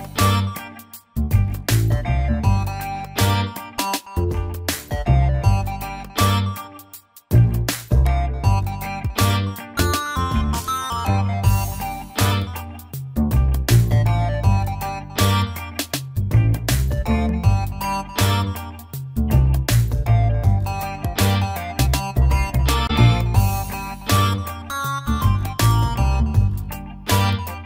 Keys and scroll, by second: 9.1 shift+F5.